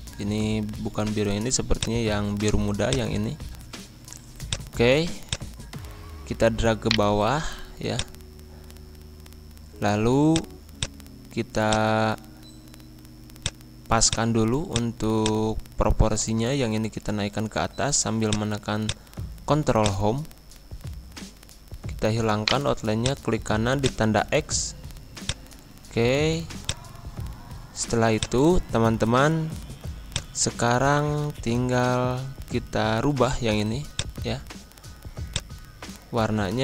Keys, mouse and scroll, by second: 1.7-6.8 drag, 6.8 shift+right click, 7.9 shift+click, 9.3 b, 10.2-16.9 drag, 16.9 ctrl+Home, 18.2-22.4 drag, 22.4 right click, 23.0 click, 24.1 scroll up 1, 25.2-26.6 drag, 26.9 scroll down 1, 27.6-28.1 scroll up 1, 28.1 click, 29.3 g, 30.0-31.8 drag, 31.8 scroll up 1, 33.9-36.6 drag.